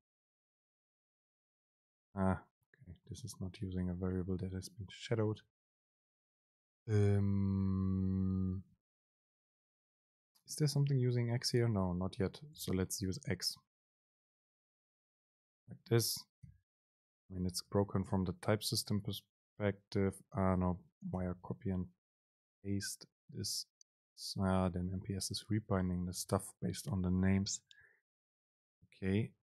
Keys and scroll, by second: 0.3 End, 0.9 Return, 1.2 super+v, 3.8 super+z, 5.0 super+z, 6.4 Up, 10.6 Down, 12.7 End, 15.5 shift+Down, 16.6 super+x, 18.2 super+v, 21.7 super+z, 25.0 super+z, 25.8 Up, 26.2 Down.